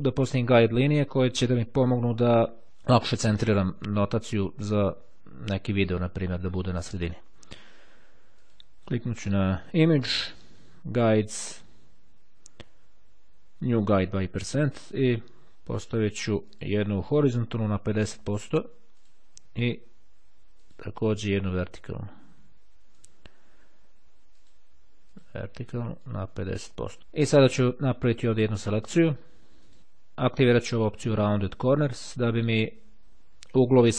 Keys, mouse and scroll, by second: 0.8-1.6 ctrl+scroll up 2, 2.0-2.6 ctrl+scroll down 1, 8.4 click, 13.0-14.6 drag, 15.9 click, 18.6-19.6 drag, 20.6 click, 23.0 click, 24.5 click, 26.2 click, 27.0 click, 29.7 click, 30.8 click.